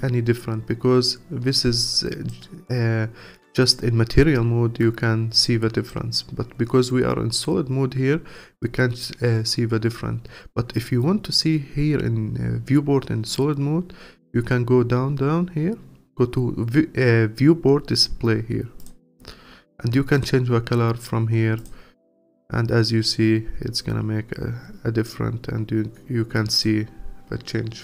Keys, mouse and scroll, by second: 11.4-13.9 scroll down 1, 13.9-15.3 scroll down 19, 18.8 click, 19.2 scroll down 5, 20.1 click, 21.6 click.